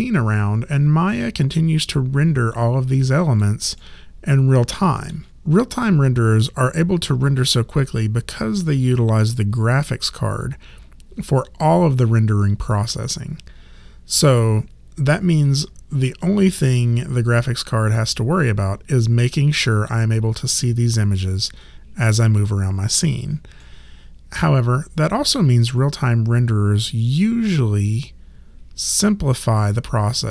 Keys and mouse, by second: 3.8 alt+middle click, 21.6 alt+click, 23.6 alt+middle click.